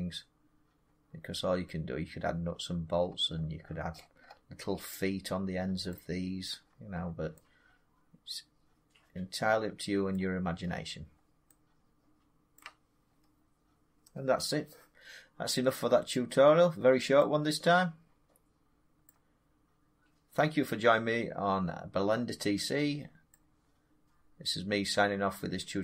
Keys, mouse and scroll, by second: 2.4 middle click, 2.5 middle click, 2.6 scroll down 3, 2.9-4.1 scroll down 17, 4.1-6.1 middle drag, 6.1-7.1 scroll, 9.8 scroll down 9, 10.0-12.0 middle click, 10.4 scroll up 4, 11.0-11.3 scroll down 2, 12.4 middle click, 13.0 middle click, 13.1 middle click, 13.2 middle click, 14.1 middle click, 14.2 scroll, 18.7-19.0 scroll, 22.0-23.9 middle drag, 24.0 middle click.